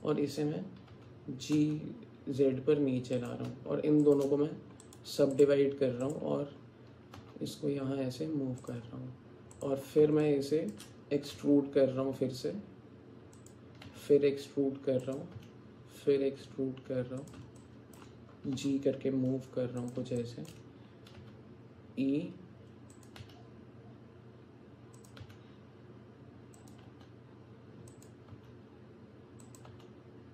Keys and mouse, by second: 0.9 g, 4.0 shift+click, 6.0 click, 7.2 g, 9.5 click, 10.2 shift+click, 11.4 e, 13.9 e, 15.4 e, 17.6 alt+shift+click, 18.5 g, 20.2 alt+shift+click, 21.2 e, 23.2 e, 25.2 e, 26.9 e, 28.3 e, 29.7 e.